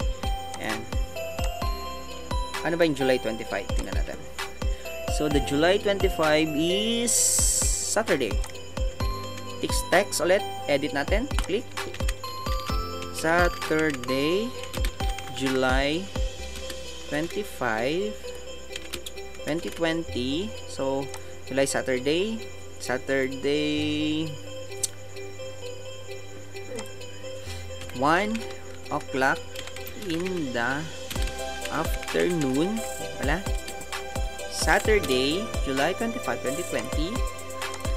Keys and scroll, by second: 9.4 t, 11.9 ctrl+a, 27.8 KP_1.